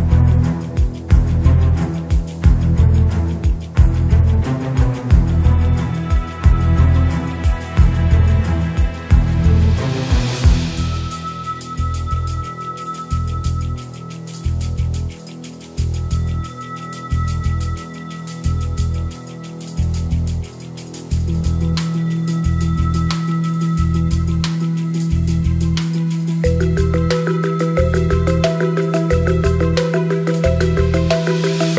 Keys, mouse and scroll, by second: 1.3 click, 6.3 click, 8.9-10.6 drag, 11.0 click, 11.5 click, 16.4 click, 18.0-19.5 drag, 21.5 click, 23.1 click, 23.5 click, 24.4 click, 28.1 click, 31.3 click.